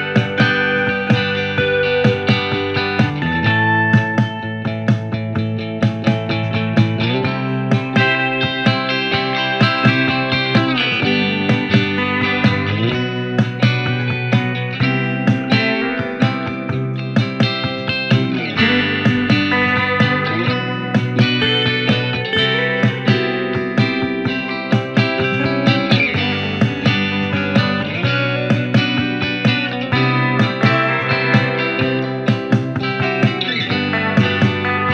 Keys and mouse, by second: 23.0 ctrl+z, 25.4 f, 27.2 middle click, 28.4 click, 30.6 f, 31.5 ctrl+middle click, 32.3 alt+shift+click, 32.7 f, 32.8 ctrl+middle click, 32.9-34.4 ctrl+drag, 34.5-34.9 ctrl+alt+drag, 34.6 ctrl+z.